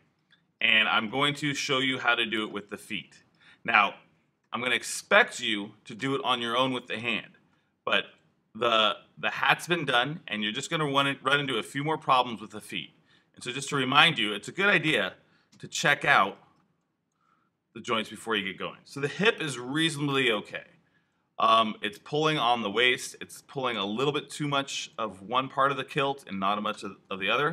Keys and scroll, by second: 15.4 alt+q, 16.0 alt+q, 18.8 e, 27.1 super+z.